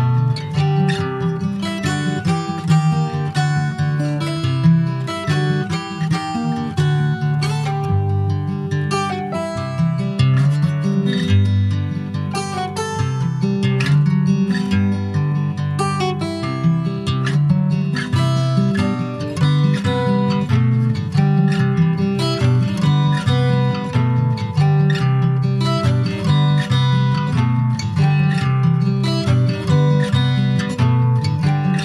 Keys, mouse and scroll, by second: 0.1 click, 0.5 click, 1.3 shift+click, 2.9 g, 4.5 f, 4.8 click, 5.0 click, 5.9 f, 6.2 click, 6.5-7.6 middle drag, 7.6 ctrl+s, 8.0 Tab, 8.3-9.4 middle drag, 9.4 ctrl+a, 11.1 Tab, 11.7 Tab, 12.3 Tab, 13.1 click, 14.3 alt+shift+click, 14.8 middle click, 15.8 alt+shift+click, 16.4 alt+shift+click, 17.1-18.2 middle drag, 18.2 s, 19.8 alt+middle click, 20.1 alt+middle click, 21.5 click, 22.4 z, 23.7 alt+z, 25.3 click, 27.9 alt+z, 28.4 middle click, 29.1 ctrl+s, 29.2 middle click, 29.7 Tab, 30.2 ctrl+a, 31.1-31.8 shift+middle drag.